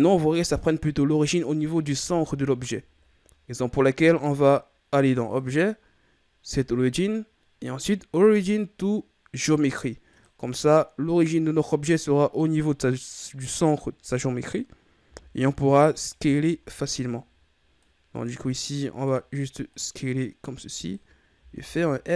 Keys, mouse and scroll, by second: 0.4-0.9 scroll up 2, 5.3-8.3 drag, 15.0 s, 16.3-16.7 shift+scroll down 2, 16.7-17.8 scroll up 3, 17.8-21.4 drag, 21.4 s.